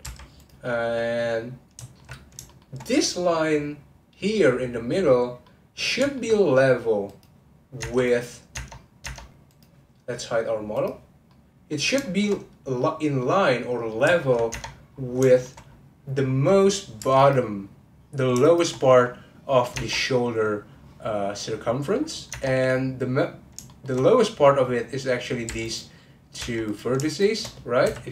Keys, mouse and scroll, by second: 0.0 1, 0.3 click, 0.9-7.1 middle drag, 7.1 click, 7.8 Tab, 8.0 click, 9.1 Tab, 9.5 click, 10.7 click, 11.3-14.5 middle drag, 14.5 Tab, 14.9-15.3 scroll up 1, 15.3 shift+middle click, 15.6-16.2 scroll up 1, 17.0 1, 17.2 click, 18.4 shift+click, 18.8 scroll down 1, 19.7 Tab, 21.9-22.3 scroll up 2, 22.3 Tab, 22.7-23.7 scroll up 1, 23.7 shift+middle click, 24.0-25.5 scroll up 1, 25.5 2, 25.6 click, 26.4 1, 26.7 click, 27.1 shift+click.